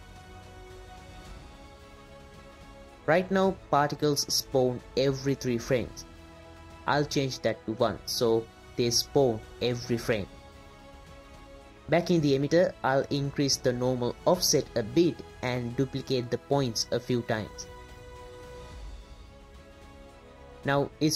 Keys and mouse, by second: 2.3-3.0 middle drag, 7.5 click, 7.6 click, 9.0 click, 11.9 drag, 12.6 click, 13.7 shift+click, 14.6 shift+click, 15.3 click, 15.8 click, 18.7-19.3 middle drag, 19.7 click.